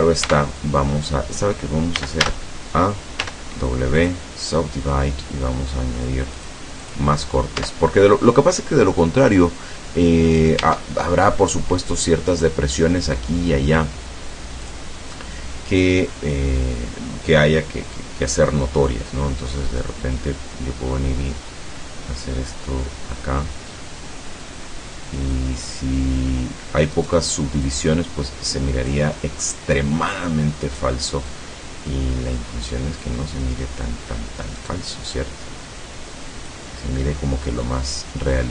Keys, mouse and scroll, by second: 0.3 Tab, 2.0 a, 3.2 w, 4.0 click, 6.4 click, 6.9 click, 7.6 Tab, 10.7 Tab, 12.4 right click, 14.7 click, 19.8-20.9 drag, 20.9-22.0 scroll down 6, 22.4 scroll down 1, 22.6-23.0 scroll up 1, 23.7 middle click, 27.0 right click, 27.7-29.2 drag, 30.7 right click, 31.3-33.3 drag, 34.6 right click, 35.2-36.7 drag, 37.3-37.6 scroll up 1, 37.9 scroll down 1.